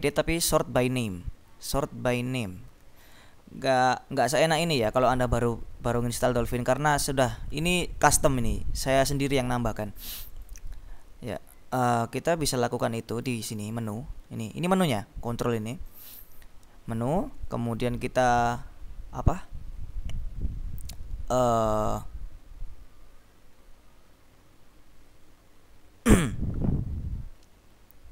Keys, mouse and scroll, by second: 1.0 click, 3.2 click, 4.6 click, 10.0-11.1 drag, 10.4 right click, 12.7 click, 15.9 click.